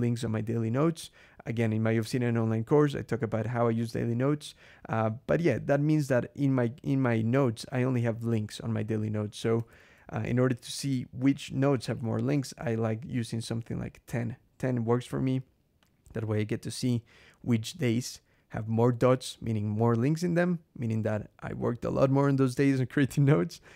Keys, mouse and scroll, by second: 9.5 ctrl+,, 10.6-11.4 drag, 11.7-12.6 typing, 13.9 Escape, 15.6 click.